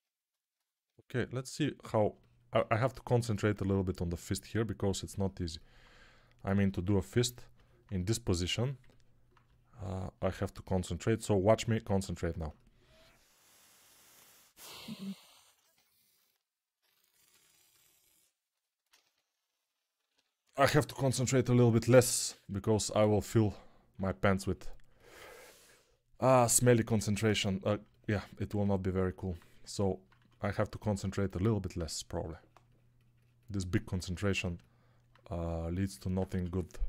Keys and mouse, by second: 17.3 ctrl+r, 18.9 1, 19.8 [, 20.0 [, 22.6 1, 23.8 3, 25.0 1, 30.0 2, 36.2 1.